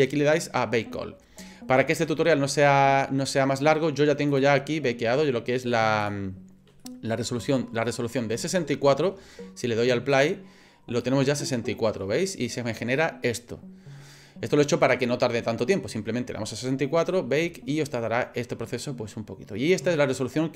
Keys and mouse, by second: 6.8 middle click, 7.9 middle click, 8.5 shift+middle click, 10.2 click, 11.0-12.0 middle drag, 12.2 middle click.